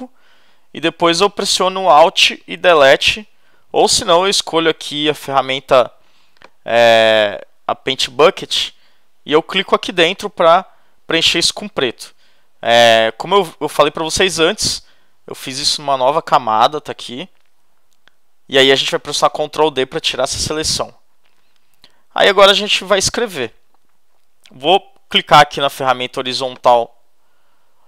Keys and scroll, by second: 2.8 alt+BackSpace, 19.6 super+d.